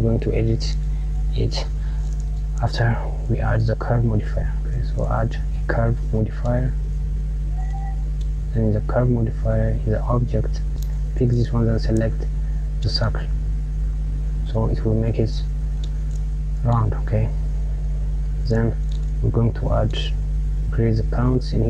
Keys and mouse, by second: 2.3-4.8 drag, 7.5-10.0 drag, 10.1 click, 13.7 KP_Subtract, 15.7 click, 21.1-21.6 drag.